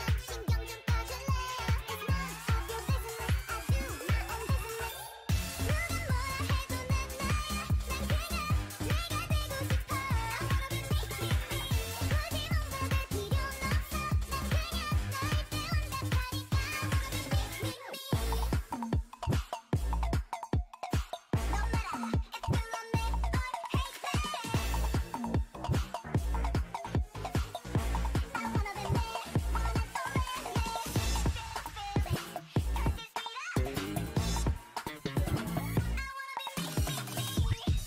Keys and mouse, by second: 13.6-15.0 middle drag, 15.0-16.2 right drag, 16.2-18.0 drag, 17.5 o, 18.0 g, 22.4-23.9 drag, 22.5 g, 24.1 middle click, 25.2 g, 27.1 middle click, 32.6-34.4 right drag, 34.0 k, 36.0 a, 36.3 Tab, 36.8 Tab, 37.6 k.